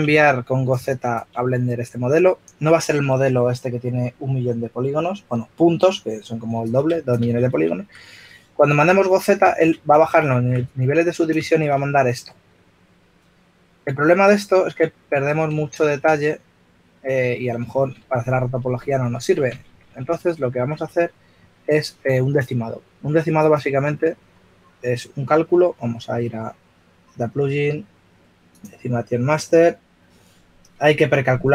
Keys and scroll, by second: 8.3 f, 10.6-11.4 typing, 13.0 typing, 14.6 typing, 17.2 f, 19.3 shift+f, 21.1-22.0 typing.